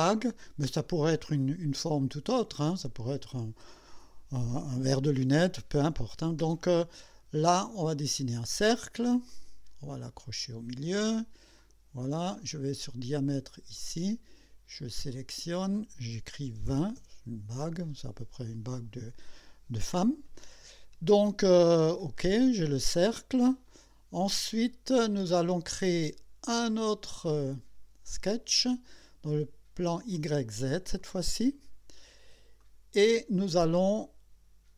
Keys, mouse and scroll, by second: 2.5 click, 9.3 click, 10.9 click, 11.6 click, 13.1 click, 13.8 click, 15.1 click, 16.5 KP_2, 16.7 KP_0, 17.0 KP_Enter, 22.4 click, 23.7 click, 27.3 click, 29.9 click, 31.0 click, 31.9-32.3 scroll up 1, 32.6 right click.